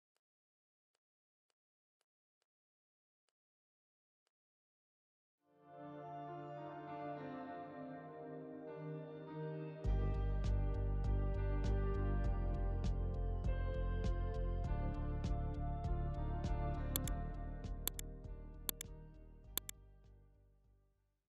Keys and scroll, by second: 4.0 v.